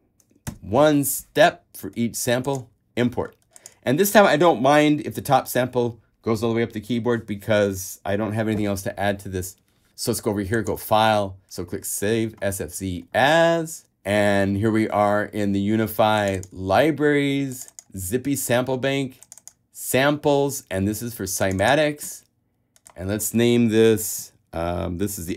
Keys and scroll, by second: 0.7 shift+\.